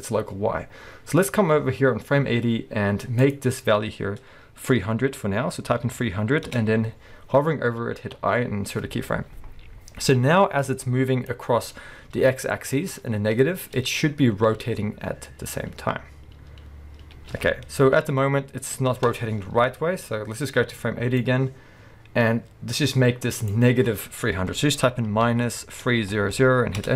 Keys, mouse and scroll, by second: 5.9 0, 6.5 Return, 13.7 space, 26.4 0, 26.8 Return.